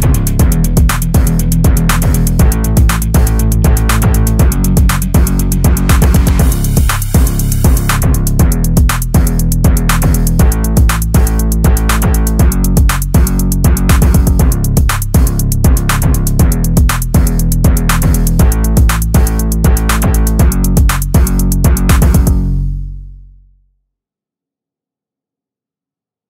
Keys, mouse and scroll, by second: 4.9-6.5 typing, 9.0 click, 18.0 click.